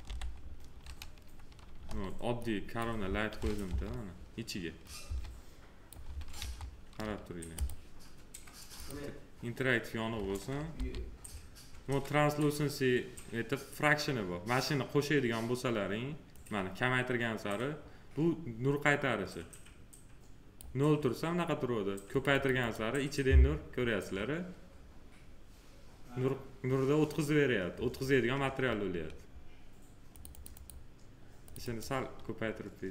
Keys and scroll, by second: 0.0 f, 1.7 s, 3.6 F3, 5.0 s, 6.3 F3, 10.6 m.